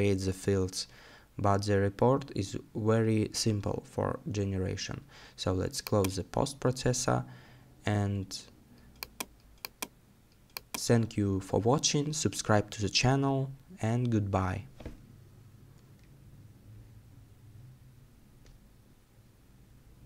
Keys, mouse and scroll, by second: 1.4 scroll down 1.